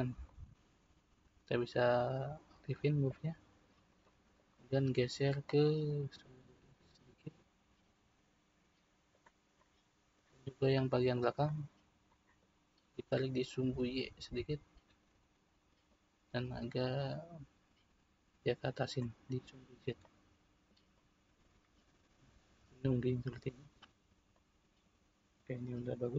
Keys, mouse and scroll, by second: 3.1 click, 4.0-5.5 middle drag, 5.5 click, 9.6-11.1 middle drag, 11.1 click, 12.0-13.1 middle drag, 13.1 click, 15.8 click, 20.0-21.9 middle drag, 21.9-22.3 scroll down 1, 22.3-26.1 middle drag.